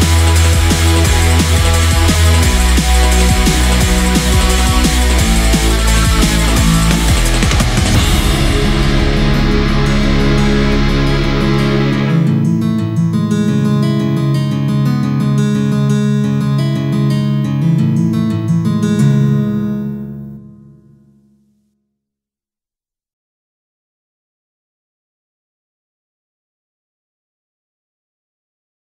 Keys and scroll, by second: 3.7 scroll down 1, 3.9 scroll up 1, 4.5 scroll down 1, 5.4 ctrl+z, 7.6-7.9 scroll down 1, 9.1 ctrl+z, 10.1-10.5 scroll up 1, 10.7 scroll down 1, 11.8 scroll down 1, 13.9 scroll down 1, 14.1 ctrl+z, 14.3 ctrl+z, 14.7 scroll up 1, 15.5 scroll down 1, 15.9-16.3 scroll up 1, 16.5 scroll down 1, 17.1 ctrl+z, 18.1 scroll down 1, 18.9 scroll up 1, 19.5-20.0 scroll up 2, 20.3 scroll down 1, 20.7-21.2 scroll up 1.